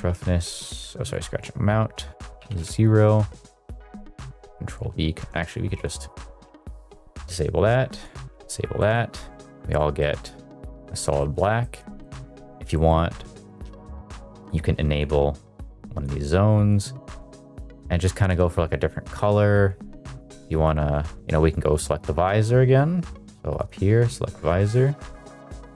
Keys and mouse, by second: 1.1-2.6 drag, 3.4 middle click, 4.4 ctrl+v, 4.8 ctrl+v, 5.8 click, 6.8 middle click, 8.0 click, 8.7 middle click, 9.9-10.8 middle drag, 11.1 middle click, 11.5 middle drag, 11.9 middle drag, 12.7 middle click, 13.4 click, 17.7 click, 19.0 click, 21.1-21.6 shift+middle drag, 21.6 click, 23.5 click, 24.1 middle click, 24.5 middle click.